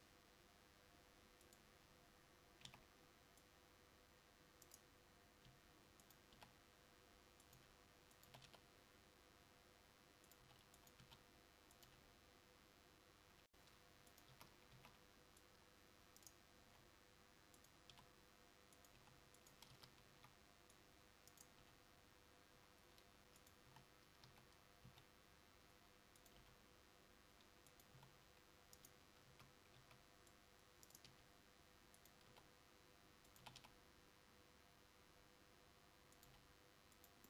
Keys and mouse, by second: 11.8 s, 14.4 a, 17.7 c, 19.9 r, 19.9 a, 23.5 g, 26.5 s, 26.5 g, 29.4 a, 32.0 c, 33.5 r, 36.4 g.